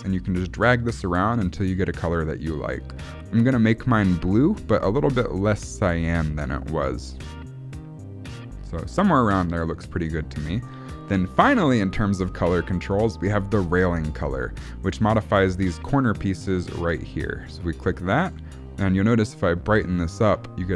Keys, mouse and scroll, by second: 17.5 click, 18.3 click.